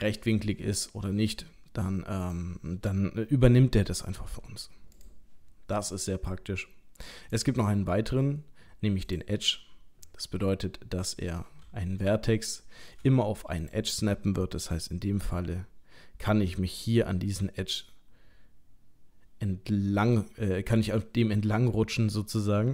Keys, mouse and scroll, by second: 1.4-1.7 scroll up 2, 2.2 click, 4.2 g, 7.3 click, 10.4-12.1 scroll up 3, 12.3 shift+middle click, 12.9 shift+middle click, 13.5 click, 15.2 g.